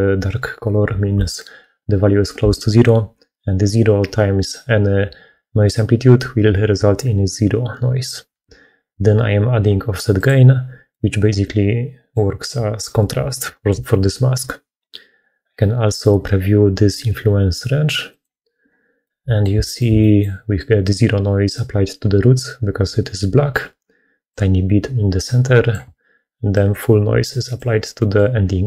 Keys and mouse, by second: 10.1 click, 10.8-12.0 middle drag, 12.6 middle click, 18.0 click, 18.9 middle click, 19.5 shift+middle click, 19.9 middle click, 24.2-25.7 drag, 26.5-27.5 drag, 27.9 middle click.